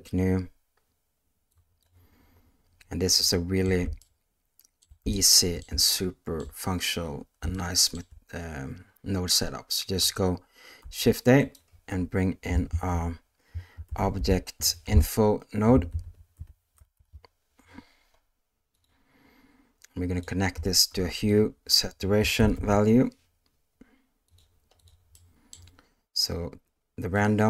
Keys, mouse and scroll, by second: 1.6 click, 3.4 shift+middle click, 4.0 ctrl+middle click, 5.1 shift+middle click, 5.9 ctrl+middle click, 7.5 shift+middle click, 10.8 shift+a, 15.9 BackSpace, 16.0 BackSpace, 20.9 shift+a, 25.1 middle click, 27.1-27.4 drag.